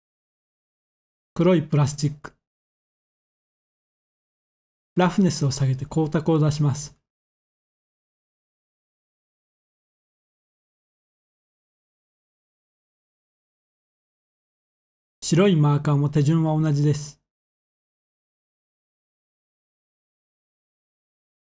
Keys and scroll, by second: 17.3-18.0 typing, 19.4 Return, 19.4 typing.